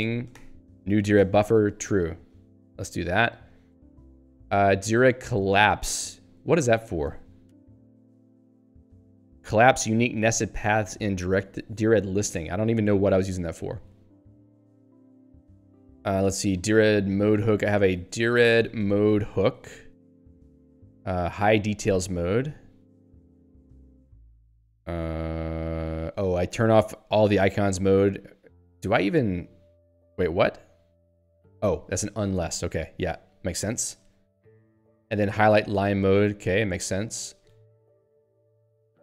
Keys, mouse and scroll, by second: 0.0-1.5 typing, 0.3 ctrl+alt+i, 2.1 Down, 3.8 Up, 5.4 Down, 5.9 Left, 12.9 ctrl+g, 13.7 ctrl+n, 17.9-19.9 typing, 20.7 Return, 21.4 ctrl+n.